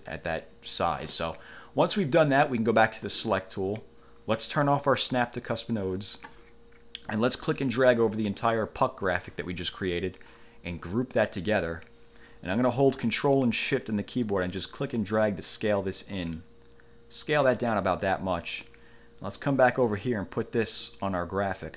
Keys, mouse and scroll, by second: 3.2 click, 5.2 click, 7.2-9.4 drag, 11.4 click, 14.4-17.7 ctrl+shift+drag, 18.8-19.8 middle drag, 20.0-21.5 drag.